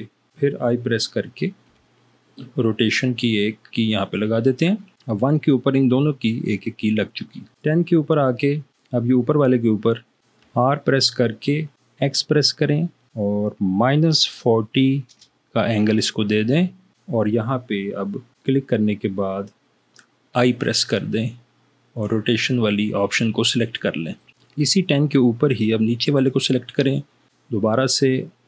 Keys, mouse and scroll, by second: 2.0 i, 7.6 click, 10.2 Escape, 10.5 r, 12.1 x, 13.9 -, 14.5 4, 15.2 0, 20.6 i.